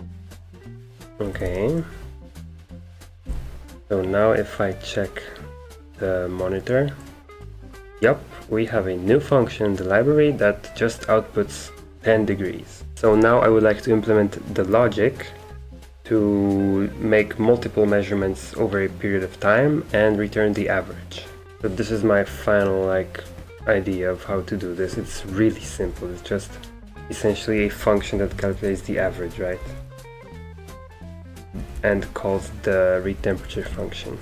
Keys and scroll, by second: 1.1-1.9 typing, 2.9-3.7 typing, 12.9-13.8 typing, 21.5 super+3, 25.6-26.2 typing, 27.5-31.9 typing, 33.1-34.2 typing.